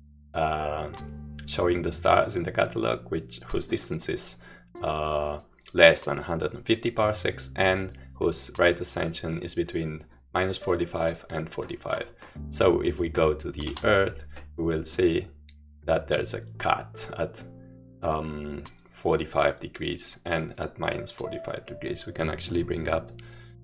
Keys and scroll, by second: 13.7 Home.